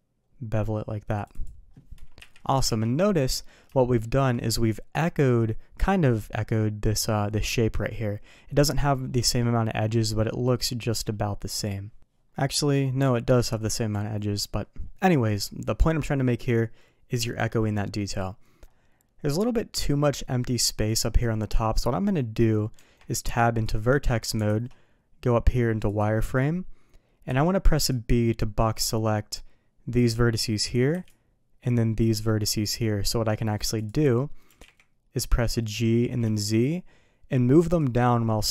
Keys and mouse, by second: 2.1 KP_3, 2.6 alt+a, 3.7 shift+middle drag, 19.7 click, 22.7 Tab, 24.4 alt+a, 25.8 click, 27.2 b, 30.9 b, 33.7 click, 34.4 g.